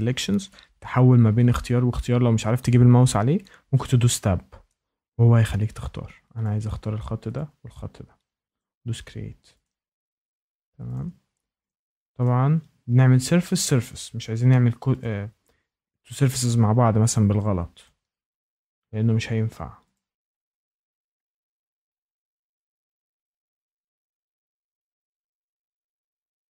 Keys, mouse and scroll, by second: 3.4 Tab, 3.8 Tab, 4.3 Tab, 4.7 Tab, 6.4 ctrl+click, 7.3 ctrl+click, 8.5 click, 9.6 click, 10.9 click, 11.6 ctrl+click, 12.2 ctrl+click, 13.5 ctrl+click, 15.0 click, 16.3 click, 17.1 click, 17.8 ctrl+click, 18.7 ctrl+click, 19.9 ctrl+click, 20.2 click, 20.8 click, 21.4 shift+middle click, 21.5-22.0 scroll, 22.1 click, 22.5 shift+middle click, 22.5 scroll down 2, 22.8 ctrl+click, 22.9 ctrl+click, 23.1 ctrl+click, 23.3 click, 23.6 click, 23.7 scroll, 23.9 shift+middle click, 24.0 click, 24.0 scroll up 6, 24.2 click, 24.4 ctrl+click, 24.5 ctrl+click, 24.8 click, 25.1 click, 25.3 click, 25.5 ctrl+click, 25.7 ctrl+click, 26.0 ctrl+click, 26.4 click.